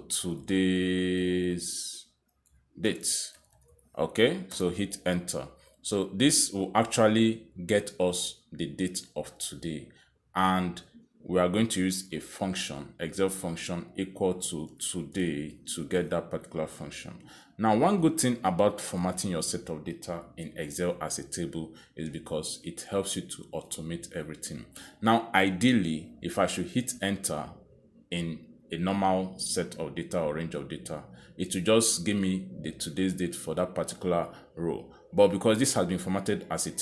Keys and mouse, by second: 1.2 typing, 2.8-3.7 typing, 4.9-9.1 typing, 9.1 Return, 12.1 click, 14.0 typing, 17.3-18.3 typing.